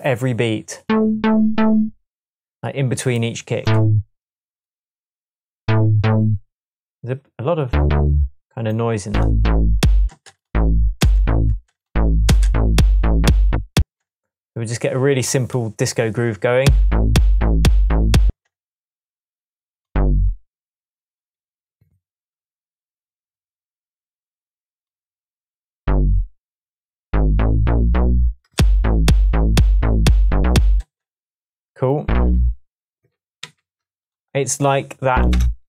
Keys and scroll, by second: 9.8 space, 12.3 space, 13.8 space, 16.6 space, 18.3 space, 20.3 Right, 21.7 Left, 22.4 Right, 28.6 space, 29.5 space, 30.8 space, 33.4 super+d, 35.3 BackSpace.